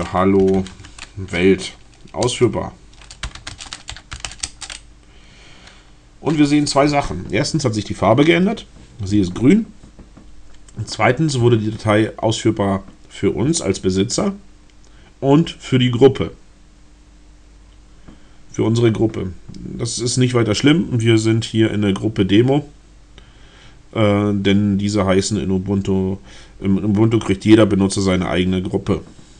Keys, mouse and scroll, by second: 0.0-0.8 typing, 2.1 Return, 3.0-4.7 typing.